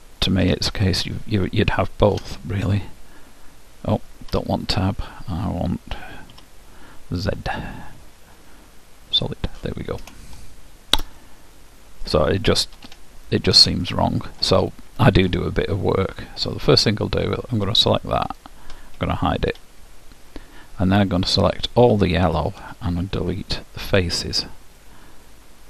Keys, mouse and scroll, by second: 0.5 Tab, 2.3 Tab, 6.5 z, 10.5-13.3 middle drag, 12.9 Tab, 14.0-17.6 middle drag, 18.5-20.3 drag, 19.6 h, 21.7-23.5 drag, 22.8 Delete, 25.0-25.6 middle drag.